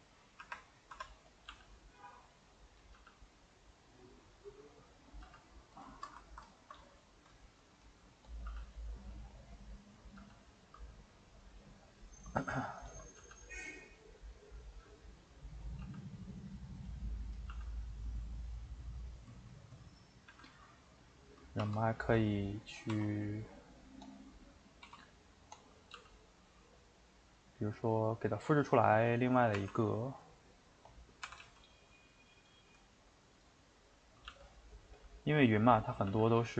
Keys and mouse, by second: 0.1 middle click, 1.0 Tab, 1.3 click, 1.5 g, 2.8 click, 2.9 g, 4.7 middle click, 5.1 click, 5.2 g, 5.9-8.2 ctrl+shift+middle drag, 8.2 click, 8.5 g, 9.9 click, 10.2 g, 12.9 shift+click, 13.2 g, 15.2 shift+middle click, 15.6 click, 15.8 g, 17.3 click, 17.5 g, 19.4 shift+middle click, 20.3 a, 20.6-21.6 middle drag, 21.6 shift+d, 22.4 middle click, 22.9 s, 24.3 middle click, 24.8 s, 27.7-29.6 middle drag, 29.6 r, 31.2 r, 32.5-34.3 middle drag, 34.3 g, 35.1 middle click, 36.1 g.